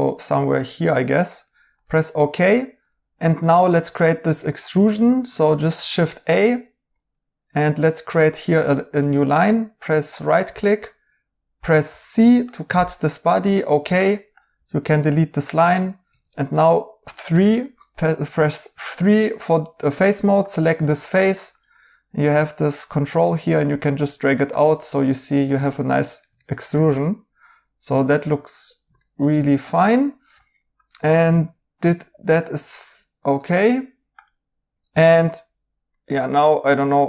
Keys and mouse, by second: 5.7 a, 9.8 right click, 11.8 c, 14.5-15.7 typing, 15.5 right click, 17.7 typing, 24.5 right click, 25.8 right click, 28.4 right click, 31.1 right click, 34.7 right click, 35.9 right click.